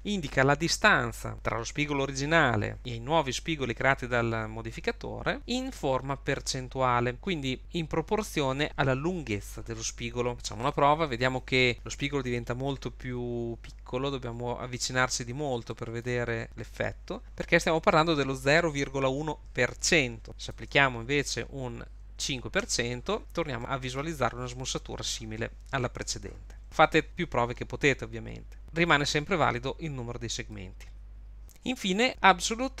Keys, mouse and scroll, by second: 13.8-14.8 scroll up 4, 15.1-15.6 scroll down 1, 15.7 shift+middle click, 19.0 scroll down 4, 20.4 click, 23.6 middle click, 30.5 click.